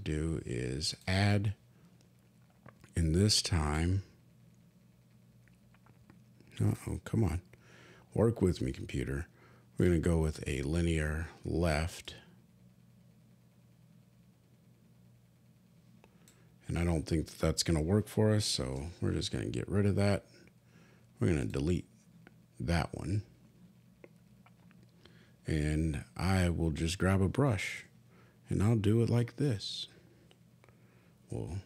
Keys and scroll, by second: 19.3 super+z, 28.4 b.